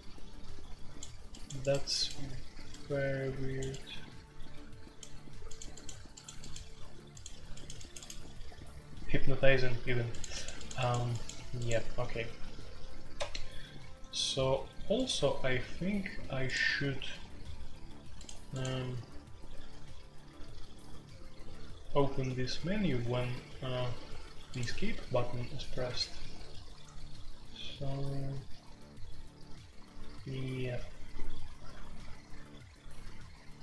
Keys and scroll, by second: 0.0-33.6 typing, 13.1 Escape, 25.9 Escape, 26.3 Escape, 26.6 Escape.